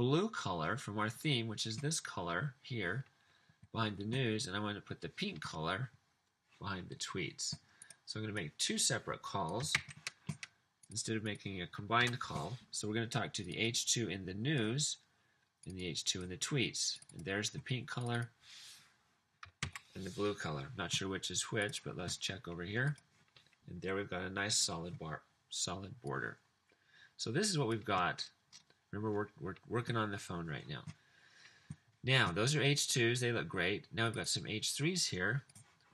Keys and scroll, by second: 9.9 super+c, 12.0 super+v, 19.6 super+s.